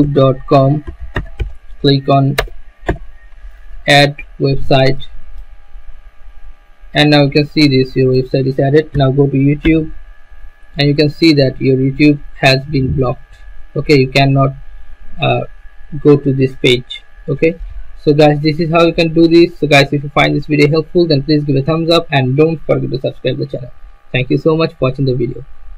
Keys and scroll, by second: 0.0-3.5 typing, 9.1 y, 9.6 Return.